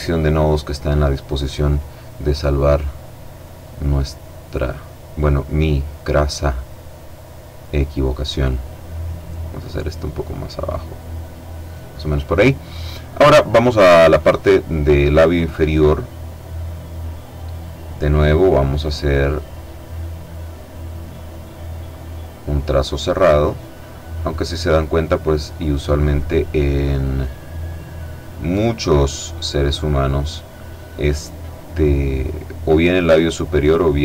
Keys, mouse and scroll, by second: 1.9 click, 3.0-7.7 drag, 8.5-11.6 drag, 13.2 click, 18.0 click, 19.7-20.7 drag, 20.8 click, 22.4 click, 23.7 click, 25.2 click, 27.7 click, 30.1 click, 32.3 click, 33.4 click.